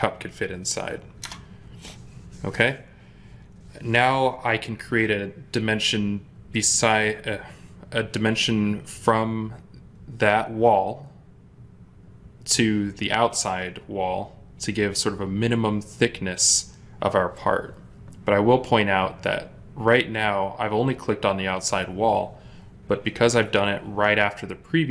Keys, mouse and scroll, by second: 1.1 Return.